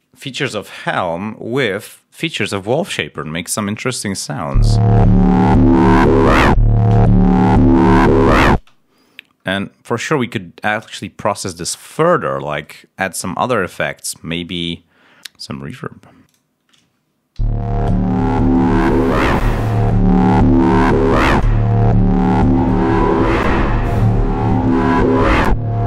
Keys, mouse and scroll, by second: 4.4 l, 5.2 ctrl+scroll down 2, 8.5 space, 9.3 scroll up 1, 9.8 scroll down 1, 10.9 scroll up 1, 11.7 click, 12.5 right click, 15.4-16.0 scroll down 1, 16.2 click, 17.3 l, 18.4 click, 22.3 click.